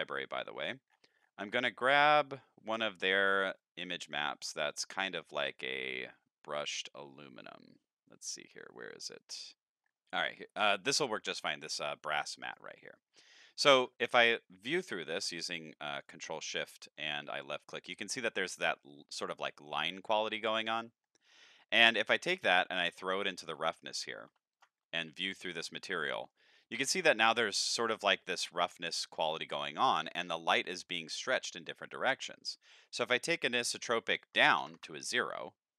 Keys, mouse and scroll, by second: 0.1-2.3 scroll down 8, 3.5-4.3 drag, 7.5 click, 9.8-10.5 middle drag, 12.3 click, 13.4 middle click, 14.0 ctrl+shift+click, 15.1-16.1 drag, 16.6 middle click, 17.6 middle click, 20.9 middle click, 21.4 click, 22.2 click, 23.6 middle click, 24.5 ctrl+shift+click, 25.8-26.3 middle drag, 27.1-27.4 middle drag, 28.4 middle click, 29.6 shift+middle drag, 32.6 click, 33.4 click.